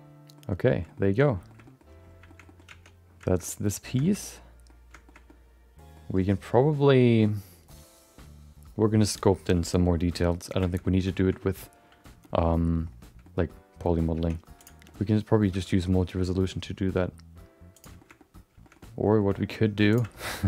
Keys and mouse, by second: 0.8 middle click, 0.9 middle click, 1.4 middle click, 1.6 middle click, 2.3 middle click, 2.4 middle click, 2.9 Tab, 3.2 shift+middle click, 3.4 middle click, 4.0 middle click, 4.2 middle click, 5.0 shift+middle click, 5.2 middle click, 10.2 middle click, 10.6 shift+middle click, 10.8 middle click, 11.2 shift+middle click, 11.4 middle click, 12.2 middle click, 13.2 middle click, 14.1 Tab, 14.6 click, 14.8 middle click, 15.5 g, 18.0 shift+middle click, 18.1 middle click, 18.6 shift+middle click, 18.8 middle click, 19.1 middle click, 19.9 click, 20.1 shift+middle click, 20.3 middle click.